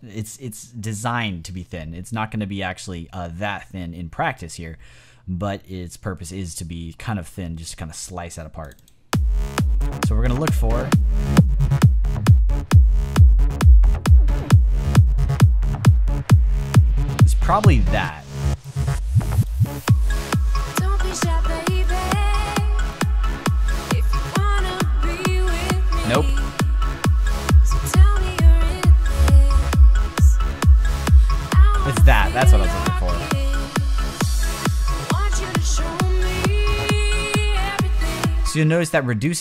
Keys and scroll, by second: 38.3 space.